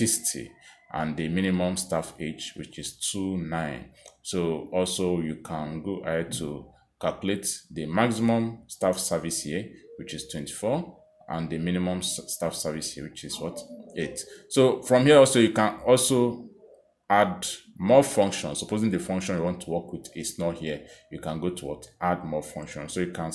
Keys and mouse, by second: 0.4 click, 1.6 click, 9.2 click, 10.5 click, 11.8 click, 13.1 click, 14.3 click, 15.8 click, 19.9 click, 20.9 click.